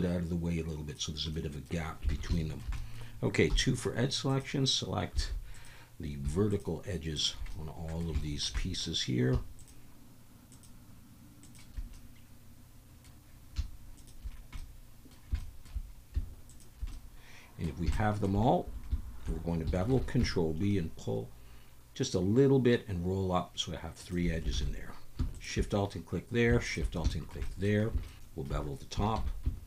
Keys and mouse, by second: 1.3 middle click, 2.3 alt+shift+a, 2.3 shift+click, 2.8 click, 3.5 2, 4.3 click, 5.3 alt+a, 5.5 click, 6.5 shift+click, 7.1 shift+click, 7.5 middle click, 8.2 shift+middle click, 8.6 middle click, 9.6 shift+click, 10.5 shift+click, 11.4 shift+click, 12.0-13.1 middle drag, 13.9 shift+click, 14.6 middle click, 15.4 shift+middle click, 16.5 shift+click, 16.9 middle click, 17.9 shift+middle click, 19.9 ctrl+b, 24.0 shift+click, 24.5 alt+a, 25.3 alt+shift+click, 26.6 alt+shift+click, 27.1 shift+click, 27.4 click, 28.0 shift+click, 29.2 ctrl+b.